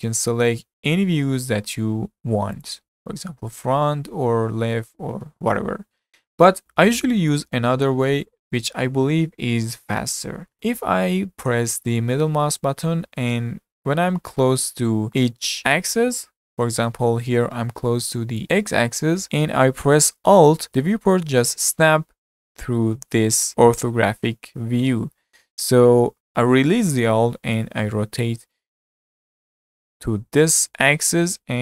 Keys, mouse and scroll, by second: 3.6-6.6 middle drag, 12.8-15.3 middle drag, 19.1-20.7 middle drag.